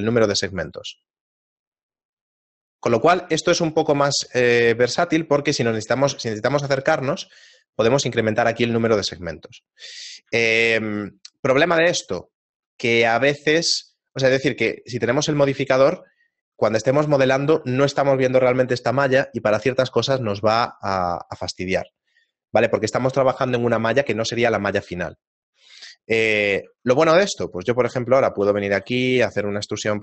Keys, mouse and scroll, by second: 0.1 click, 0.5 click, 3.5 shift+middle click, 4.7-5.3 scroll down 4, 5.3-5.9 scroll up 1, 5.9 scroll up 9, 6.3 shift+middle click, 6.7 middle click, 8.0 click, 8.3 click, 10.5 shift+middle click, 11.0 middle click, 11.5-12.1 scroll down 7, 12.3 shift+middle click, 13.4 shift+middle click, 15.2 right click, 15.9 Tab, 26.1 shift+middle click, 26.9 ctrl+Tab, 27.6 right click, 28.4 e, 28.7 s, 29.7 e.